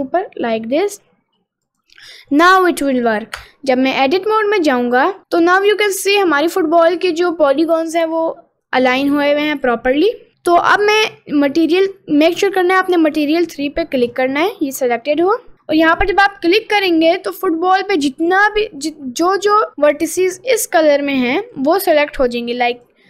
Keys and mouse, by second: 1.8 click, 3.4 Tab, 4.0-5.7 middle drag, 5.9 middle click, 6.9 middle click, 7.6 middle click, 8.2 middle click, 9.1 middle click, 9.7 middle click, 11.7 click, 14.1 click, 17.5 middle click, 18.1 middle click, 18.7 middle click, 21.4 middle click, 22.9 click.